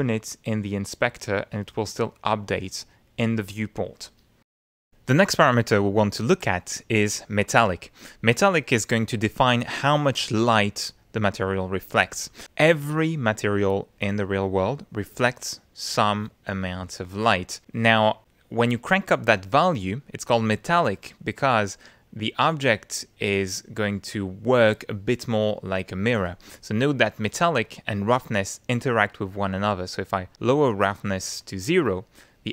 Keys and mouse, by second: 4.5 F10, 6.6 click, 7.2 click, 18.2-20.9 drag, 21.2-23.0 middle drag, 23.3-25.3 middle drag, 27.6 click, 29.3 middle click, 29.7-31.6 drag, 31.8-32.5 middle drag.